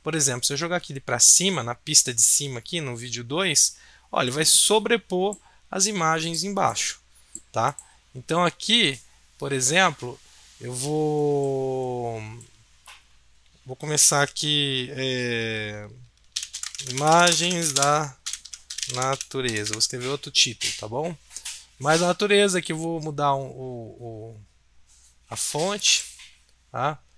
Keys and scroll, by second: 16.1-20.1 typing, 22.7-23.5 typing.